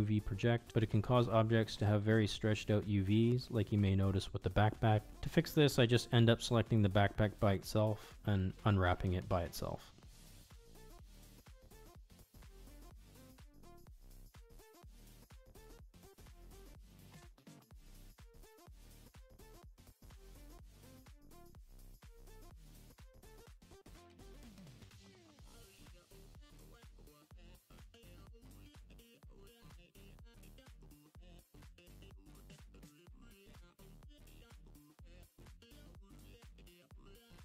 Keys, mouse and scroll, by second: 0.1 middle click, 0.9 l, 1.0 l, 1.2 middle click, 1.3 middle click, 1.5 middle click, 1.8 Tab, 2.0 middle drag, 2.2 middle click, 2.4 middle click, 3.0 Tab, 3.1 a, 3.8 ctrl+z, 3.8 i, 4.3 ctrl+z, 4.3 a, 4.4 u, 6.1 s, 6.1 g, 6.3 shift+middle drag, 6.6 Tab, 7.1 shift+middle click, 7.6 Tab, 7.8 a, 8.4 s, 8.7 Tab, 9.1 middle click, 9.2 shift+middle drag, 9.7 shift+middle click, 10.2 Tab, 10.5 a, 10.6 u, 11.5 s, 12.1 Tab, 12.7 click, 12.8 Tab, 13.2 click, 13.4 l, 13.8 u, 14.7 s, 16.1 Tab, 16.5 Tab, 16.7 a, 16.8 u, 17.7 s, 18.4 Tab, 18.8-19.1 shift+middle drag, 19.3 click, 19.3 middle drag, 19.5 shift+middle click, 19.7 ctrl+z, 19.9 ctrl+z, 20.3 ctrl+z, 20.5 Tab, 20.6 a, 20.7 u, 21.3 u, 23.1 s, 23.8 middle click, 24.1 Tab, 24.1 middle drag, 24.3 middle drag, 24.4 middle click, 24.6 middle drag, 24.8 middle click, 25.0 middle drag, 25.2 click, 25.7 Tab, 25.7 a, 25.9 u, 26.5 s, 27.1 middle click, 27.2 middle click, 27.7 Tab, 28.0 drag, 28.3 middle drag, 28.4 shift+middle drag, 29.0 Tab, 29.0 a, 29.2 u, 29.4 u, 30.3 s, 31.0 Tab, 31.2 middle click, 31.5 click, 31.5 middle drag, 32.0 shift+Tab, 32.0 shift+middle click, 32.4 a, 33.0 u, 33.2 s, 33.9 middle click, 34.4 Tab, 34.4 click, 34.5 shift+middle click, 34.7 Tab, 34.9 a, 35.1 u, 36.1 s, 36.5 Tab, 36.8 click, 36.9 middle click, 37.1 middle click.